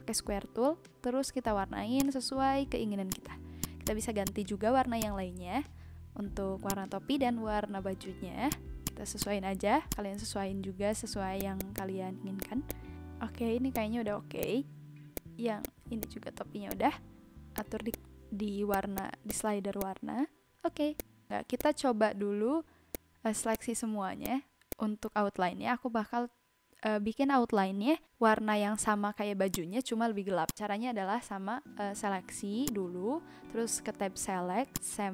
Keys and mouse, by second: 1.9 click, 3.1 click, 6.6 click, 8.4 click, 11.3 click, 12.4 click, 13.7 click, 14.4 click, 15.1 click, 15.6 click, 16.7 click, 17.5 click, 18.7 click, 19.8 click, 20.9 click, 21.5 click, 22.9 click, 23.5 click, 24.2 click, 24.7 click, 29.5 click, 30.4 click, 32.6 click, 34.7 click.